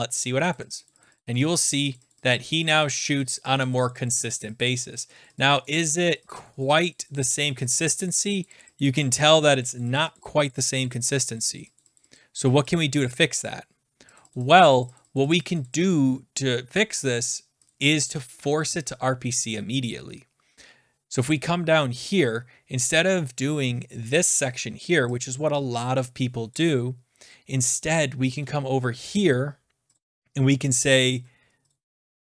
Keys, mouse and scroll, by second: 2.1 click, 2.2 click, 2.4 click, 2.6 click, 2.8 click, 3.0 click, 3.5-5.7 drag, 6.3 click, 6.4 click, 7.0 click, 7.7-8.9 drag, 9.4 click, 9.6 click, 10.3-12.3 drag, 13.0 click, 14.2 click, 14.3 click, 14.5 click, 14.7 click, 14.8 click, 15.0 click, 15.1 click, 15.3 click, 15.6 click, 15.9 click, 17.7 click, 18.5 click, 21.2 click, 21.9-22.5 scroll down 3, 23.1 scroll down 2, 26.5 click, 28.4 BackSpace, 28.8 scroll down 4, 29.9 click, 31.1 click, 31.7 click.